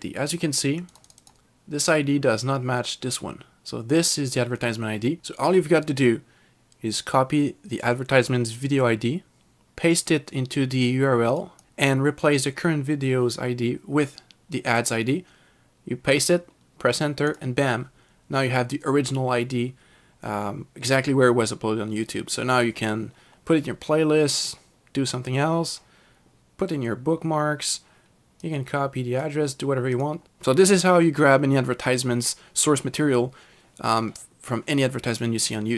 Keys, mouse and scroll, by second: 0.9 click, 1.1 double click, 1.3 click, 11.4 click, 17.3 click, 28.6 click, 30.0 click.